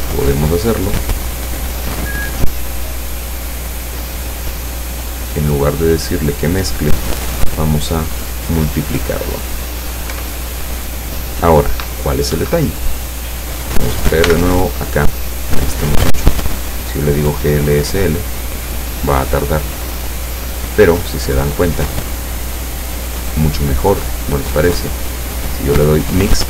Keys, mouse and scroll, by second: 0.4-4.3 drag, 5.5 click, 7.7 click, 10.2 p, 12.4 Escape, 14.3 n, 16.5 click, 17.5 click, 24.1 click, 25.3 click.